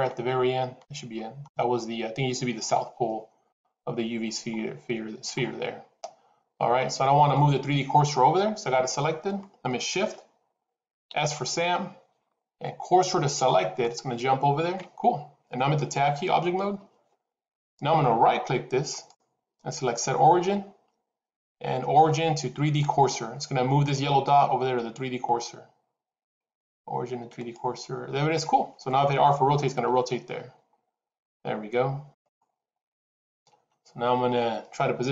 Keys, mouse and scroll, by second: 2.5-2.9 scroll down 5, 3.4 KP_7, 4.1 scroll down 1, 5.2 scroll down 4, 10.9 shift+s, 16.5 Tab, 18.8 right click, 29.7 r, 32.8 scroll down 3.